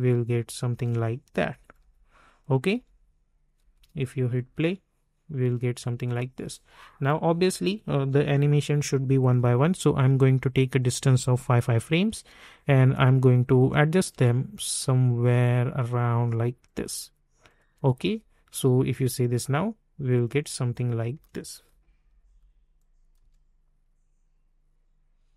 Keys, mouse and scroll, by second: 1.3-4.4 typing, 2.4 click, 3.9 click, 6.5-8.2 drag, 8.2 =, 9.9 click, 12.0 [, 12.9 click, 14.1 [, 14.9 click, 15.9 [, 16.6 click, 17.7 [, 18.5 click, 18.9 space, 21.7 typing, 22.7 click, 23.1 space.